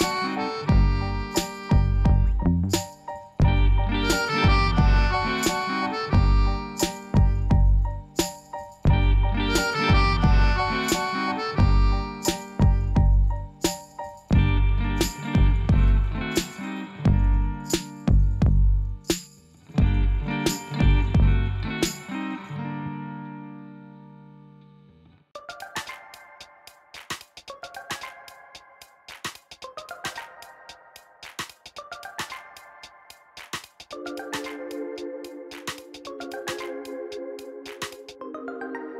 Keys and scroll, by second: 3.0 Tab, 3.8 3, 7.2 r, 7.4 9, 8.2 Escape, 8.5 r, 8.6 -, 8.7 9, 8.8 Return, 10.0 s, 10.1 x, 11.3 s, 11.4 z, 11.9 y, 13.8 Tab, 19.0 shift+d, 19.1 x, 23.5 shift+r, 32.0 5, 32.1 Return.